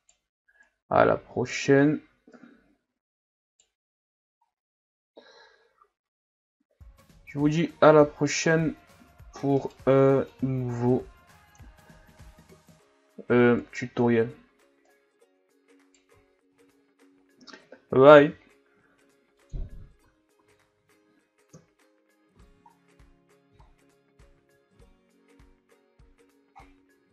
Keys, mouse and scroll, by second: 0.0 right click, 0.6 right click, 2.4 right click, 3.9 Tab, 4.5-7.6 scroll down 4, 7.6-9.1 middle drag, 9.1 Tab, 9.6 right click, 10.3-12.7 drag, 12.7 alt+s, 14.9 right click, 16.1 Tab, 16.4 KP_3, 16.7-18.0 ctrl+scroll up 10, 18.1 g, 19.6 Tab, 20.0 a, 20.4 a, 20.5-21.5 scroll down 5, 21.5 KP_1, 22.3 ctrl+s, 22.7-23.6 scroll down 1, 23.6-24.3 shift+scroll down 5, 24.3 ctrl+s.